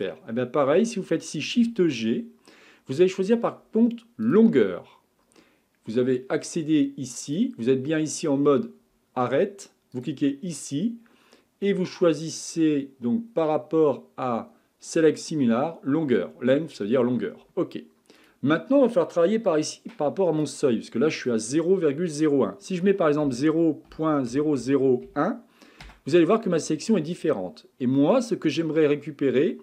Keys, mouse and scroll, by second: 1.7 shift+g, 7.3-13.2 drag, 18.2-23.5 drag, 24.6 KP_0.